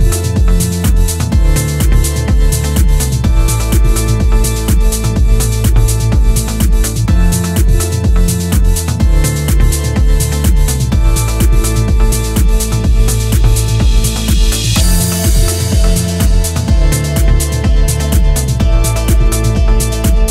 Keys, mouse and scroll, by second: 1.8 click, 2.8 middle click, 6.0 Tab, 6.6 middle click, 7.8-8.2 scroll up 3, 8.2 middle click, 13.2-13.8 scroll down 1, 13.8-15.2 scroll down 1, 15.2-16.8 scroll up 1, 17.5 ctrl+r.